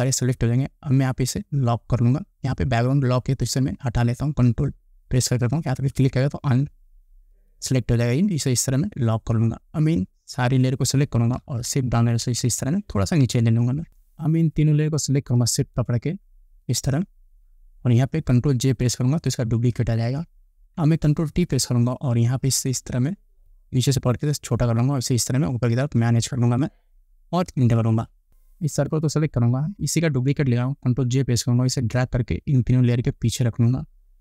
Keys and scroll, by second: 11.9 shift+Down, 13.9 ctrl+z, 19.0 ctrl+j, 21.5 ctrl+t, 27.8 Return, 31.3 ctrl+j.